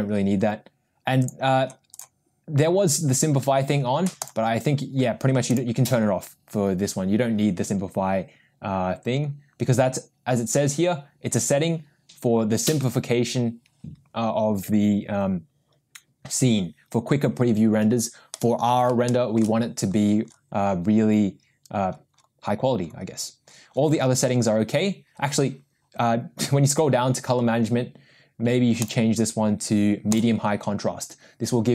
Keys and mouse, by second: 1.2 click, 2.0 click, 4.3 drag, 5.5 click, 28.8-30.3 drag.